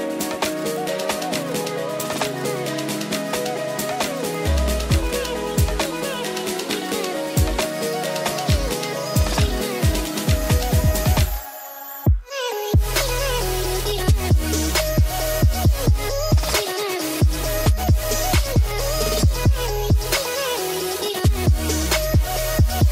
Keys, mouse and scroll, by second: 3.0 click, 5.5 click, 6.2 drag, 6.4 ctrl+s, 6.6-6.9 drag, 7.2-7.6 drag, 8.3-9.4 drag, 9.4-9.9 middle drag, 10.9 drag, 11.3 middle drag, 14.8-15.4 middle drag, 16.0 click, 19.7 middle click.